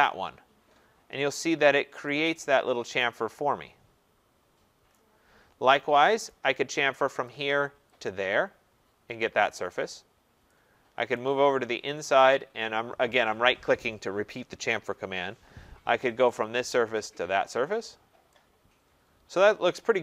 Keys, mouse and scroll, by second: 0.8 scroll, 1.5 scroll, 4.9 right click, 5.2 middle click, 6.3 right click, 7.2 click, 8.0 click, 11.2 right click, 12.2 right click, 16.4 click, 17.1 click, 17.9 middle click, 18.0 middle click, 19.5 right click.